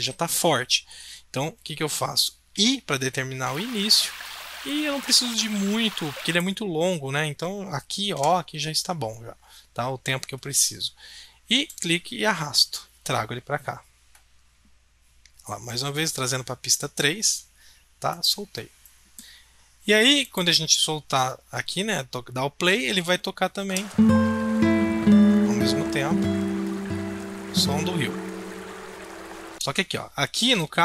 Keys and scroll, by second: 2.5 i, 8.1 o.